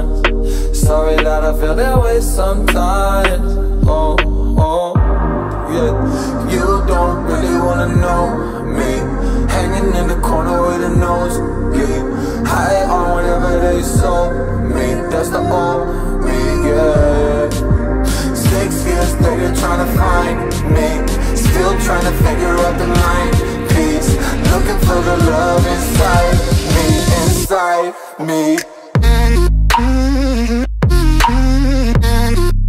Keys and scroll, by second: 1.8 ctrl+z, 4.8 ctrl+t.